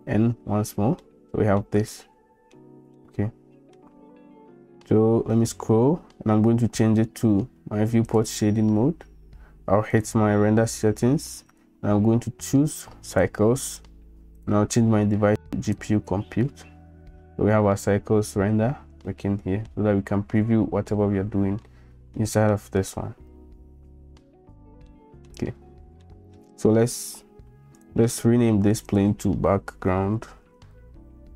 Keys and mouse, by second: 1.1-1.6 drag, 2.0 click, 3.0 shift+click, 3.3 shift+middle click, 8.3-9.6 drag, 11.6-13.6 drag, 14.6-16.3 drag, 19.1 middle click, 21.7 middle click, 21.9 drag, 22.1 middle click, 22.5 shift+drag, 23.3 n, 24.9-25.3 middle drag, 26.1 middle click, 28.9-31.3 drag.